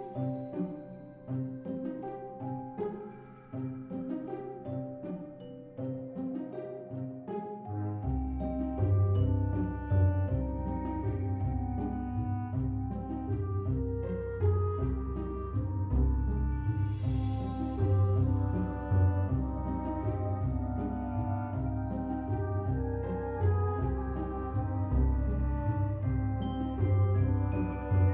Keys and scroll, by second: 1.3 x, 3.1 ctrl+c, 3.2 ctrl+v, 4.1 ctrl+c, 4.9 ctrl+c, 5.1 ctrl+v, 6.5 ctrl+c, 6.8 ctrl+v, 7.4 z, 8.3 alt+z, 11.7 ctrl+s, 14.3 ctrl+c, 14.5 ctrl+v, 16.0 ctrl+z, 17.4 ctrl+c, 17.6 ctrl+v, 19.1 ctrl+c, 19.3 ctrl+v, 20.4 ctrl+c, 20.6 ctrl+v, 21.3 z, 21.9 alt+x, 27.0 ctrl+c, 27.1 ctrl+v.